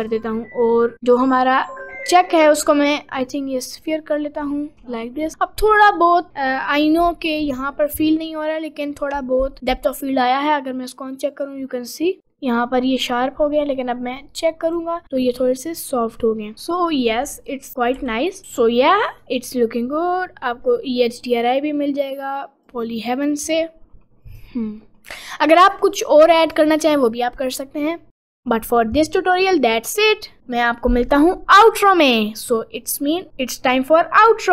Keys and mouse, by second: 10.6 click, 14.0 click, 18.0 g, 19.0 middle click, 19.5 middle click, 20.7 middle click, 23.9 g, 24.2 click, 24.8 middle click, 25.7 middle click, 26.5 click.